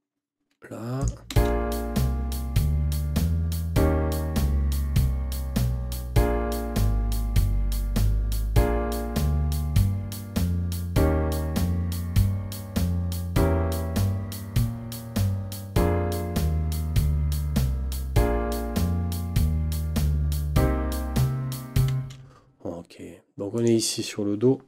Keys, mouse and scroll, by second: 1.0 click, 1.3 space, 21.9 space, 23.5 click.